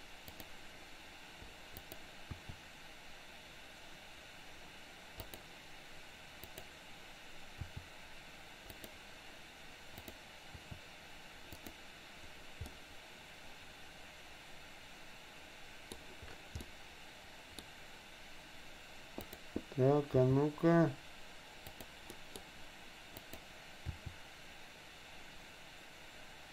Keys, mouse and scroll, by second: 0.4 click, 1.9 click, 3.2 r, 6.6 click, 7.8 r, 9.9 click, 10.6 r, 12.7-15.9 middle drag, 16.7-17.7 middle drag, 19.2 click, 20.2 g, 22.2 middle click, 23.2 click, 23.9 r.